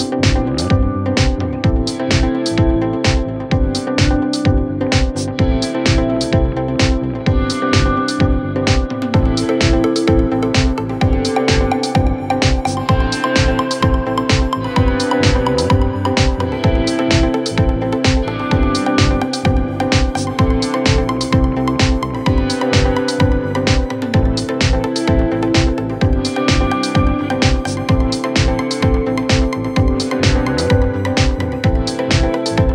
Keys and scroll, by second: 4.4 ctrl+r, 9.4 ctrl+z.